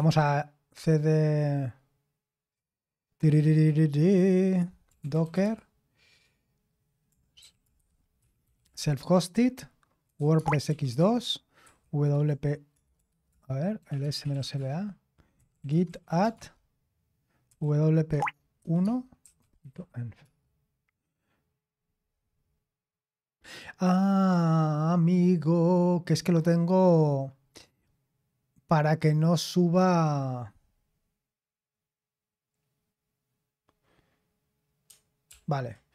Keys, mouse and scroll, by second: 0.0-0.3 typing, 4.6-5.9 typing, 7.1-20.2 typing, 35.3 ctrl+p.